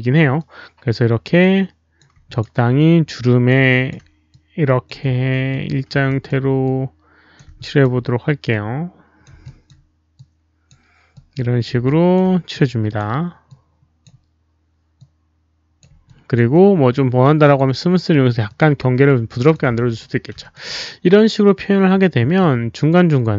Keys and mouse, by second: 0.3-1.9 alt+drag, 2.2 alt+click, 2.7 click, 3.6 ctrl+alt+z, 3.6 alt+click, 3.6 alt+right click, 4.2 ctrl+z, 4.2 alt+click, 4.2 alt+right click, 5.4 alt+click, 6.0 alt+click, 6.6 alt+click, 6.6 alt+right click, 7.3 alt+right click, 7.5 alt+click, 8.4 alt+click, 9.4 alt+click, 10.1 alt+click, 11.1 alt+click, 11.8 alt+click, 12.5 alt+click, 13.4 alt+click, 14.9 alt+click, 16.0 alt+click, 17.4 alt+click, 18.4 alt+click, 19.0 alt+click, 19.6 w, 20.4 alt+click, 22.7 alt+click, 22.7 w.